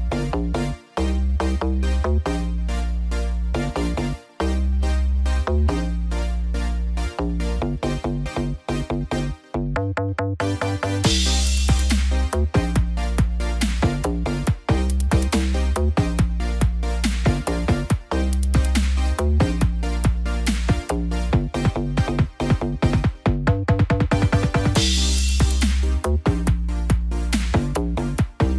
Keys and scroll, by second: 14.5 ctrl+0, 18.0 ctrl+alt+shift+e.